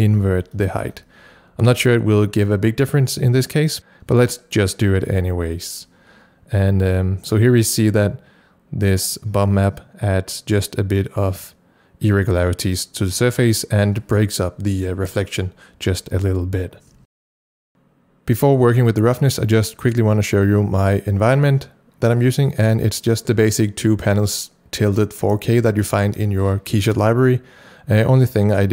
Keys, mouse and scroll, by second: 0.2 KP_Subtract, 0.6 KP_1, 0.8 KP_Enter, 17.2 KP_Enter, 17.2 scroll down 1, 17.6 click, 17.7 click, 22.6 click.